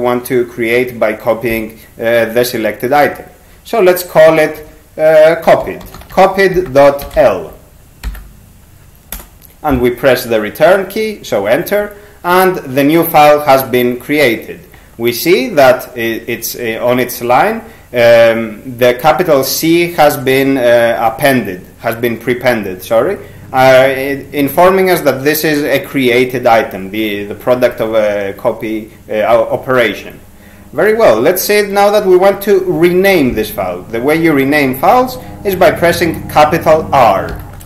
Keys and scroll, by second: 4.6-8.3 typing, 9.2 Return, 37.3 shift+r.